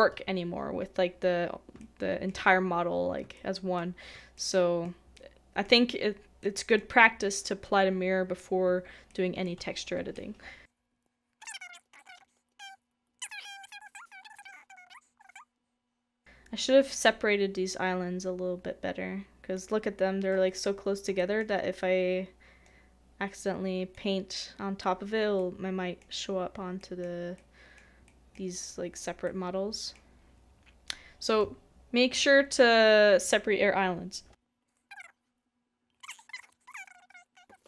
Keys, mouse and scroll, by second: 1.8 shift+middle click, 3.3 shift+middle click, 4.3 shift+middle click, 8.6 middle click, 9.1 shift+middle click, 11.4 shift+middle click, 11.9 shift+middle click, 11.9-12.2 scroll down 2, 12.0 middle click, 12.2 scroll up 1, 12.4 shift+middle click, 14.1 shift+middle click, 14.3 shift+middle click, 14.4 s, 19.8 s, 19.8-20.3 scroll up 1, 20.8 scroll down 1, 20.8 scroll up 1, 21.2 shift+middle click, 21.5-25.4 shift+scroll up 2, 25.4 middle click.